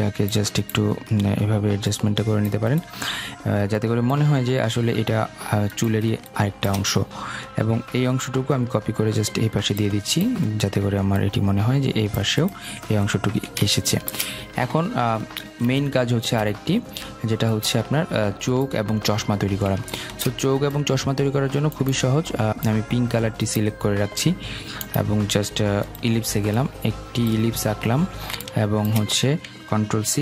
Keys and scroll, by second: 29.6 ctrl+c, 30.0 ctrl+f.